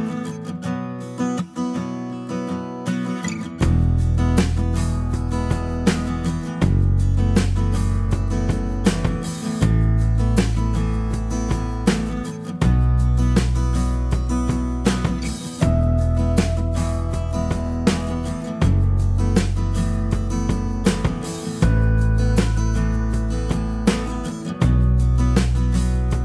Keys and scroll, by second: 0.1 g, 4.0 b, 18.1 typing, 23.0-24.1 typing.